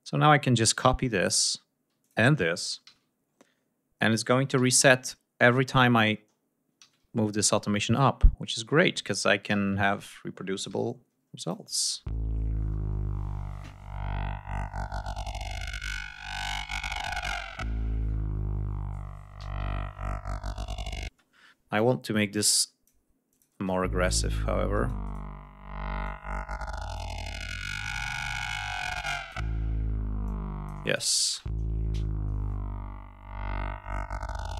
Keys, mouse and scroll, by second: 0.2-1.4 drag, 1.9 ctrl+click, 2.8 ctrl+c, 3.0 ctrl+scroll up 2, 4.4 ctrl+v, 6.7 ctrl+v, 7.0 ctrl+scroll down 2, 7.5 ctrl+scroll up 2, 9.4 ctrl+v, 9.9 ctrl+scroll down 2, 10.6 ctrl+g, 11.3 click, 11.7 space, 17.6 ctrl+scroll up 2, 18.3 ctrl+scroll up 2, 19.3 d, 19.6 ctrl+scroll down 2, 21.0 space, 21.6-22.9 drag, 23.2 click, 23.4 space, 24.6 shift+right click, 25.9 click, 28.9 shift+click, 30.2 click, 30.8 space, 31.0 ctrl+click, 31.4 ctrl+scroll down 2, 31.8 ctrl+scroll up 2, 34.4 shift+right click.